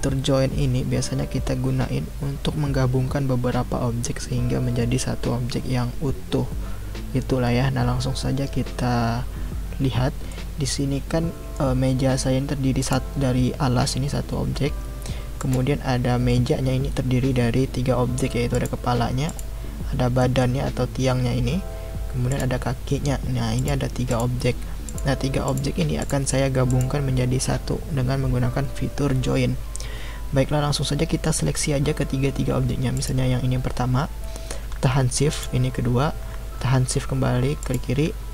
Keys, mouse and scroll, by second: 10.3-12.8 middle drag, 12.8 click, 15.4 click, 18.5 click, 19.3 click, 20.2-22.3 middle drag, 22.3 click, 23.6 click, 24.1 click, 24.9 click, 25.5 click, 26.0 click, 26.7 click, 32.9 click, 35.3 shift+click, 37.6 shift+click.